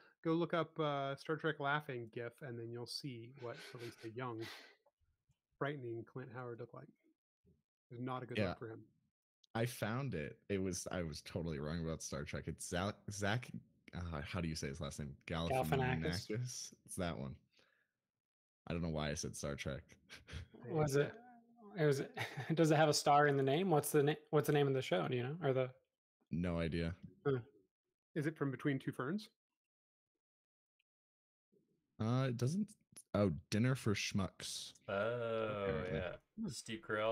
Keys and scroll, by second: 1.8 super+c, 17.3 BackSpace, 29.6 super+z, 30.3 super+z.